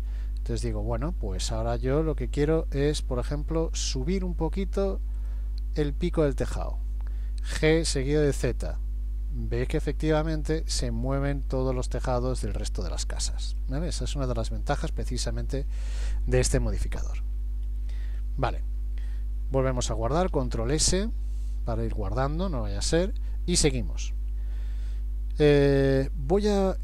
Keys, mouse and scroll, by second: 5.2 click, 6.1 click, 7.7 g, 14.3 Tab, 15.2 middle click, 16.0-17.0 scroll down 2, 17.3-17.7 scroll down 1, 17.7-18.2 scroll up 1, 18.2 scroll up 1, 20.4 ctrl+s, 23.1 scroll up 1.